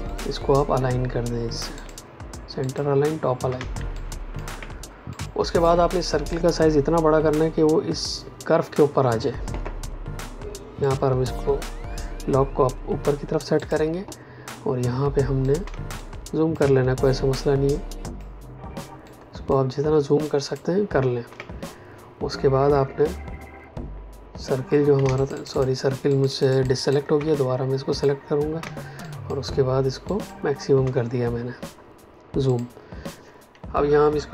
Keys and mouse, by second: 3.5 space, 3.9 click, 5.0 click, 10.8 click, 13.5 click, 15.6 space, 15.9 ctrl+click, 17.2 ctrl+click, 19.0 ctrl+click, 20.2 ctrl+click, 24.7 ctrl+Num_Lock, 25.0 space, 25.1 ctrl+alt+click, 25.5 space, 27.2 click, 28.5 space, 28.9 ctrl+click, 30.0 ctrl+click, 32.4 click, 34.2 shift+Up.